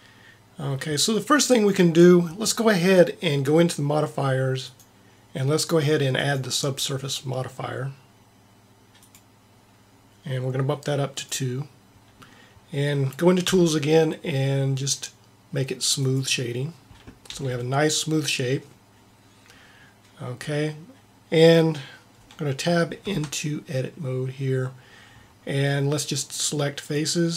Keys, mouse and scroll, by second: 4.6-7.9 drag, 11.1-12.9 drag, 13.1 click, 13.4 t, 15.9 click, 16.8 click, 17.2 t, 23.0 Tab, 26.9-27.3 drag.